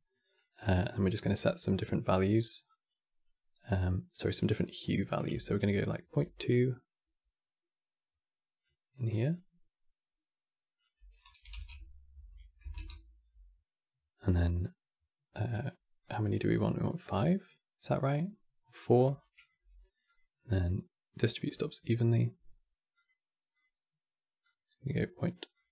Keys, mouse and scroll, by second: 0.0-0.5 drag, 8.3 click, 9.0 click, 13.9-18.7 drag, 19.0-23.3 drag, 25.2 click.